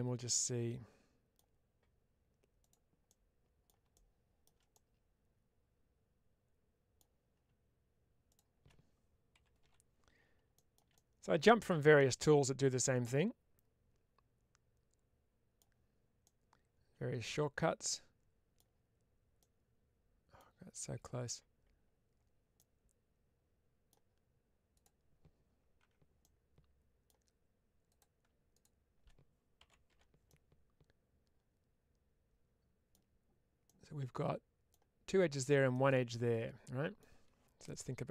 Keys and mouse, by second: 2.5 click, 2.9 middle click, 4.6-6.8 middle drag, 8.2 shift+click, 10.8-15.4 middle drag, 16.1-18.4 middle drag, 19.3 middle click, 22.5-23.7 middle drag, 24.6 click, 25.7 4, 26.1 middle click, 27.8 click, 30.1-32.8 middle drag, 33.5-34.6 middle drag, 35.6-36.8 middle drag.